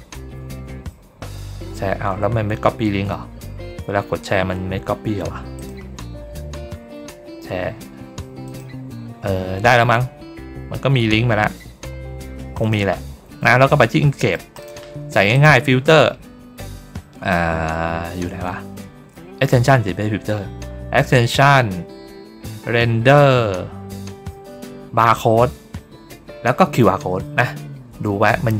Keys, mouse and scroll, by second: 5.4 click, 8.3 click, 12.5 click, 13.9 middle click, 14.5 click, 15.2 click.